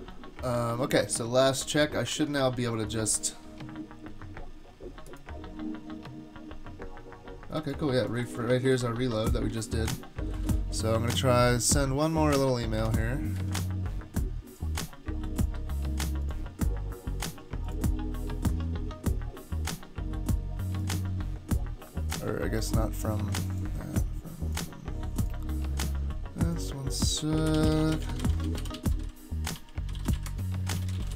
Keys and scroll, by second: 1.4 super+Tab, 1.6 super+Tab, 2.1 super+Tab, 10.3 super+k, 12.9 super+`, 13.4 super+`, 27.2-31.1 typing.